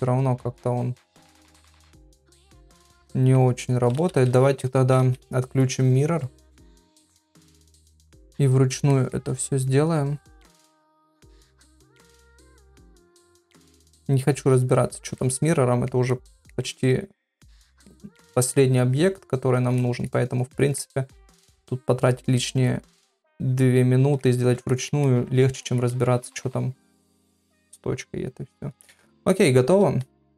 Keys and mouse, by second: 2.7 middle click, 4.0 ctrl+z, 4.2 ctrl+z, 4.4 middle click, 5.0 ctrl+z, 7.1-8.3 drag, 8.9 middle click, 9.6-10.6 drag, 11.0 middle click, 11.7-12.8 drag, 13.0 middle click, 13.9-15.0 drag, 15.2 middle click, 16.1 middle click, 17.0 click, 18.6-19.6 drag, 19.8 middle click, 20.5 middle click, 21.3 click, 22.4 middle click, 23.1-24.1 drag, 24.7 ctrl+middle click, 25.1 middle click, 25.7 ctrl+middle click, 25.9 middle click, 27.0 ctrl+middle click, 27.4-29.0 middle drag, 29.1 shift+middle click.